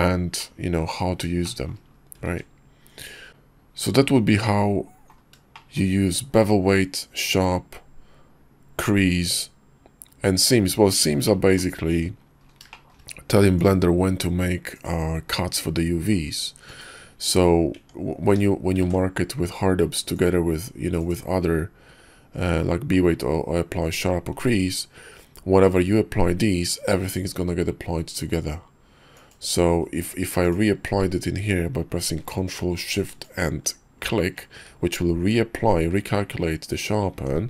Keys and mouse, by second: 0.4-0.8 middle drag, 1.0 KP_5, 1.4-1.7 shift+middle drag, 2.2 ctrl+`, 4.6-5.1 middle drag, 5.5 shift+middle drag, 6.5-10.4 middle drag, 11.3 middle click, 11.9 Tab, 12.7 shift+middle click, 13.6-14.9 middle drag, 17.7 Tab, 18.2 q, 18.8 ctrl+`, 30.4 click, 30.9 q, 37.1 Tab.